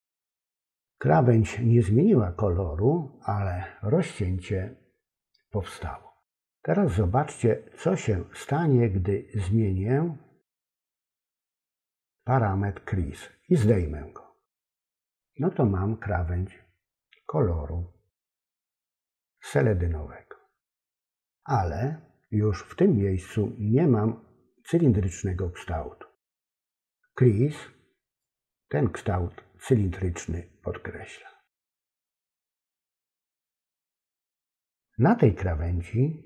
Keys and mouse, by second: 13.8-15.1 drag, 28.3-31.6 drag, 32.3 click.